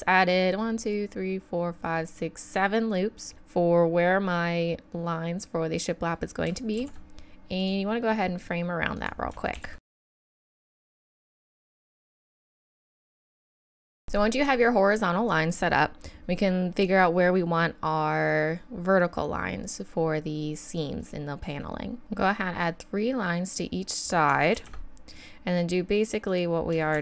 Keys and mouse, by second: 6.8 ctrl+r, 9.5 ctrl+r, 10.0 ctrl+r, 10.2 ctrl+r, 10.5 ctrl+r, 10.8 ctrl+r, 11.5 ctrl+r, 11.7 ctrl+r, 12.0 ctrl+r, 12.3 ctrl+r, 12.8 ctrl+r, 13.0 ctrl+r, 13.3 ctrl+r, 22.0 ctrl+r, 24.5 ctrl+r, 26.9 ctrl+r.